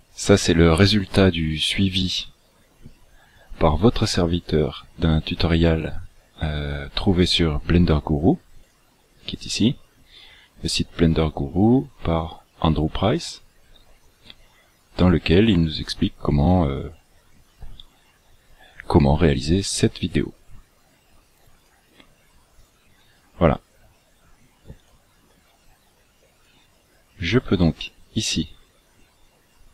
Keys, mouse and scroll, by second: 25.0 click.